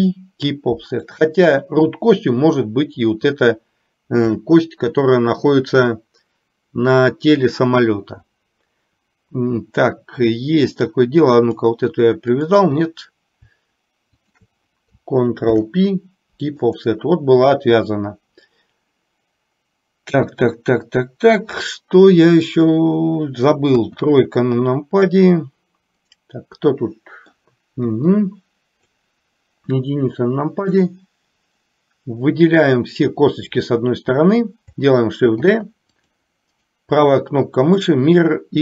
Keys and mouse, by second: 0.0 ctrl+p, 11.4 click, 14.3 shift+click, 15.6 ctrl+p, 23.7 KP_1, 26.3-27.5 middle drag, 28.0 KP_1, 29.1-30.9 drag, 35.5 shift+d, 38.5-38.6 right drag.